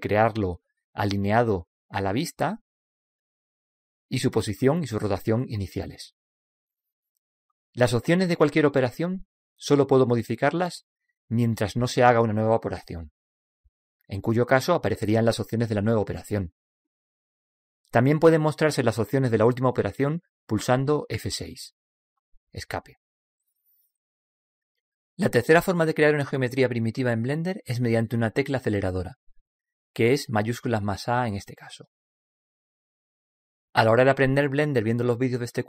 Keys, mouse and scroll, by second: 1.6-4.6 drag, 4.8 click, 22.0 F6, 31.4 shift+a.